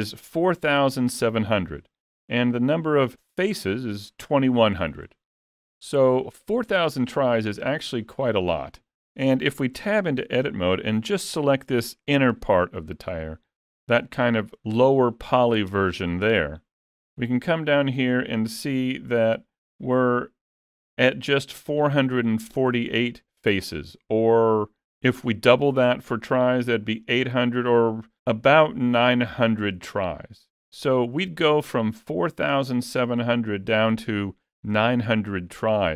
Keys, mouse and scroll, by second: 5.1 middle click, 6.8 middle click, 9.8 Tab, 12.1 l.